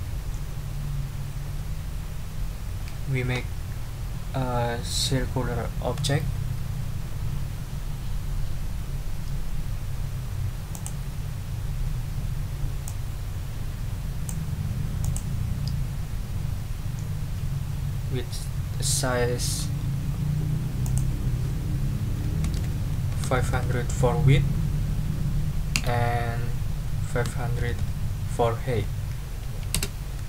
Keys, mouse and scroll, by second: 10.7 click, 12.8-14.4 drag, 15.0 click, 20.8 click, 22.4 ctrl+a, 23.0-23.9 typing, 25.8 Tab, 27.2 5, 27.6 0, 29.7 Return.